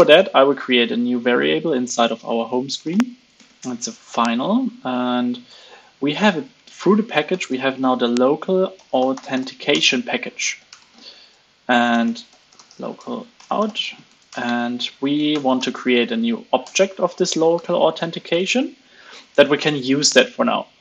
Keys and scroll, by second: 17.9 super+s.